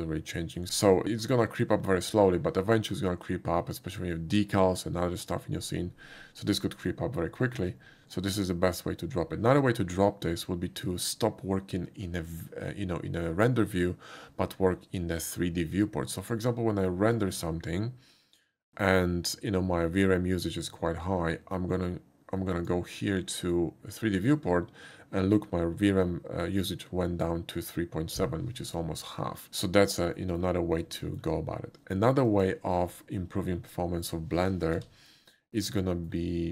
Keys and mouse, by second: 0.8 shift+middle click, 6.9 middle drag, 7.4 shift+middle click, 22.6 click, 29.7 shift+middle drag, 30.2 shift+middle click, 31.1 shift+middle click, 32.3 shift+click, 35.1 n, 35.7 middle click.